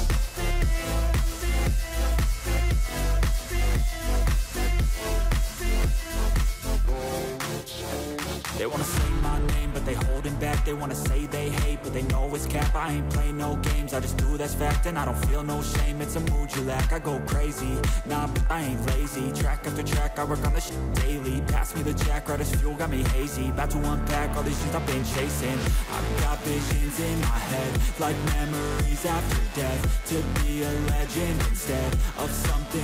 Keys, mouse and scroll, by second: 1.8-2.1 scroll down 5, 5.9 scroll down 2, 10.8-11.4 scroll up 3, 11.4-12.1 scroll up 1, 12.1 scroll, 12.3 ctrl+-, 12.5 ctrl+-, 12.8 ctrl+-, 13.2 ctrl+=, 15.3-15.7 scroll up 1.